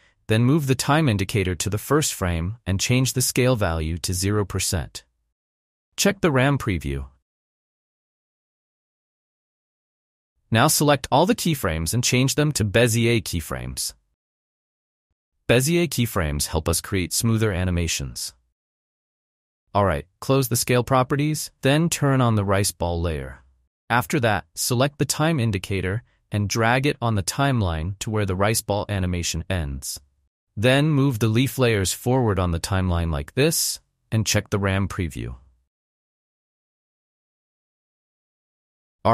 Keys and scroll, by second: 4.4 Return, 6.0 space, 9.0 space, 13.8 F9, 16.1 space, 19.5 space, 21.0 u, 38.3 space.